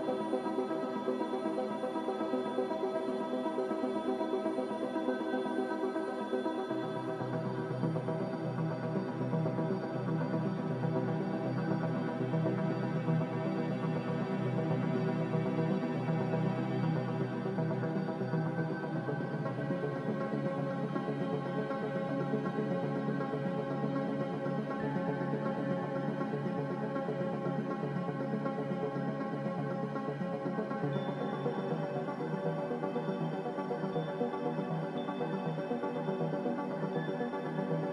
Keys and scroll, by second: 2.2 Return, 2.2 typing, 4.4 4, 4.4 0, 7.2 n, 10.0 ctrl+b, 20.7 x, 23.5 typing, 24.0 Return, 27.4 z, 29.2 Escape, 36.6 n.